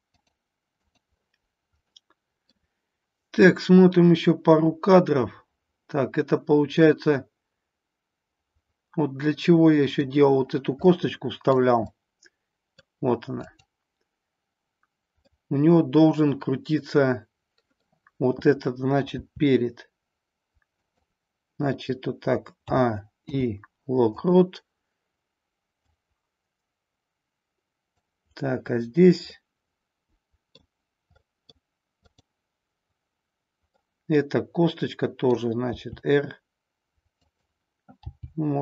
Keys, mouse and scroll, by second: 0.1 click, 0.9 click, 1.9 middle click, 3.3-10.0 drag, 11.0 middle click, 12.0-13.0 middle drag, 15.2-17.9 middle drag, 19.1 r, 22.6 a, 23.2 i, 25.8-28.1 drag, 29.2-30.6 middle drag, 31.2 middle click, 33.8-35.4 middle drag, 35.7 r, 37.4 click, 38.0 g.